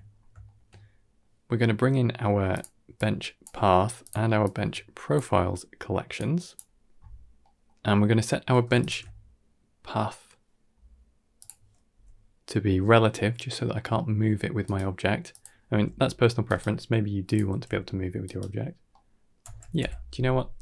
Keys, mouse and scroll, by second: 0.3 shift+middle drag, 0.7 middle click, 2.4 click, 2.8 click, 4.3 click, 6.0 click, 6.9 middle click, 7.2-7.9 scroll up 5, 7.5 middle click, 7.9 middle click, 8.6 alt+shift+click, 10.6-11.2 scroll down 2, 11.2 click, 11.8 g, 15.2 click, 15.6 g, 17.1 click, 17.5 g, 18.8 middle click, 19.4 g.